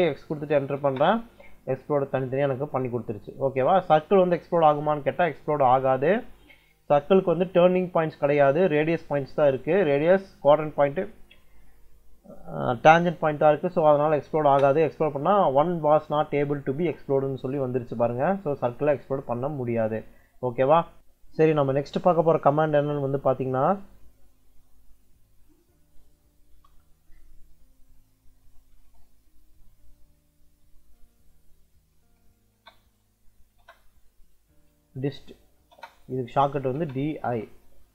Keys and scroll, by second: 0.2 x, 0.7 space, 3.4 Escape, 8.8 Escape, 13.8 x, 14.3 space, 18.0 Escape, 19.7 Escape, 26.4 Return, 27.8 Return, 28.2 c, 28.6 m, 29.6 BackSpace, 30.8 Caps_Lock, 31.3-33.4 typing, 34.5-37.7 typing.